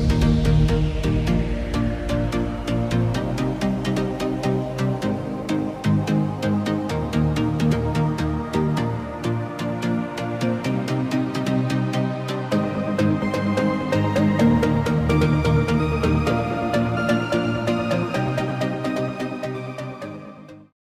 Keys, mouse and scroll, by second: 1.2 click, 5.3 click, 9.1 click, 9.9-11.2 scroll up 1, 12.0-12.7 scroll down 1, 13.0 scroll up 1, 14.2 click, 14.6-15.8 typing, 17.1 click, 17.3 scroll up 1.